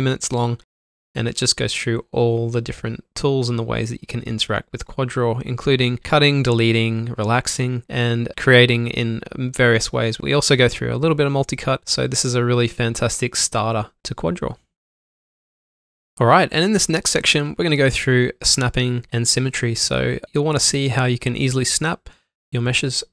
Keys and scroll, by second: 2.8-3.5 typing, 4.9 typing, 7.9 Tab, 10.2 ctrl+q, 11.7 alt+Num_Lock, 12.4 alt+Num_Lock, 12.5 typing, 18.2 typing, 20.3 shift+Num_Lock, 20.3 typing, 22.2 alt+shift+c.